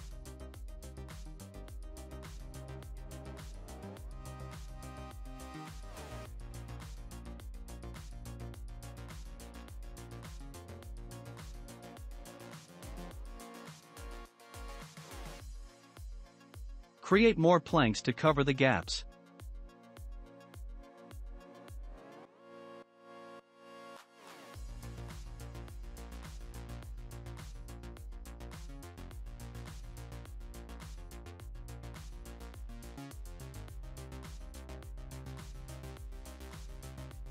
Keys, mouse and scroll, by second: 2.2 click, 2.6-3.0 scroll down 2, 3.0-4.8 middle drag, 4.8 Tab, 5.6 click, 6.6-7.6 drag, 7.7-8.3 drag, 8.3-9.8 middle drag, 9.8 scroll up 2, 10.8-11.7 drag, 10.8 scroll up 2, 11.7-12.9 middle drag, 12.9-13.4 shift+drag, 13.4-14.0 shift+middle drag, 14.0-14.4 scroll down 2, 14.4-17.6 middle drag, 18.1 alt+d, 21.2 scroll up 2, 21.5-22.4 middle drag, 22.4 alt+d, 24.7-25.4 middle drag, 25.4 alt+d, 29.6 click, 30.0-30.6 scroll down 1, 30.6-32.1 shift+middle drag, 32.1-32.6 scroll down 1, 32.6-35.0 shift+middle drag, 35.0 click.